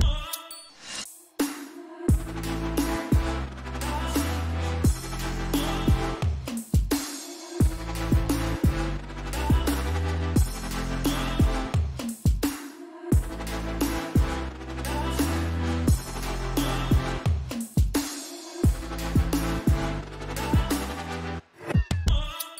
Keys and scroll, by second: 0.9-2.5 typing, 3.7-5.2 typing, 9.5-11.9 typing, 16.8-18.4 typing.